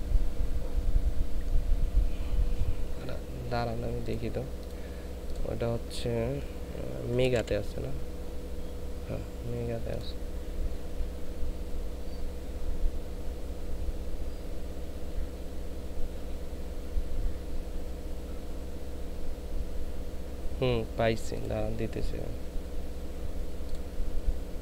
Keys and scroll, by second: 7.2 m, 7.4 e.